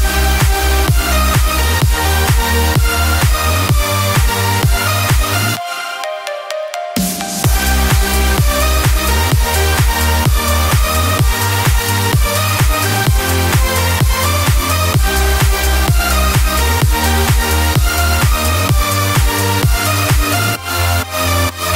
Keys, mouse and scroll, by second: 0.7-1.2 typing, 1.5 click, 2.2-3.1 scroll, 4.6 click, 5.3 click, 5.6 click, 6.4 click, 7.0 h, 7.7 click, 8.2 click, 8.7 click, 9.3 click, 16.9 click, 17.7 click, 18.5-18.9 scroll, 20.2 click.